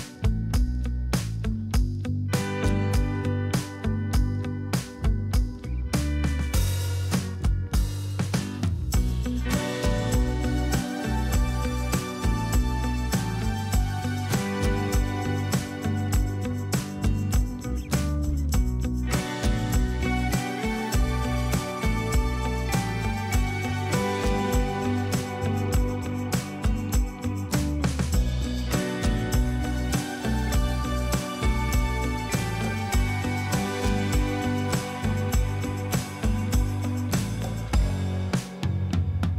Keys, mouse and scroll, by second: 14.5 ctrl+click, 25.4-26.1 typing, 28.0-29.5 typing, 29.1 double click.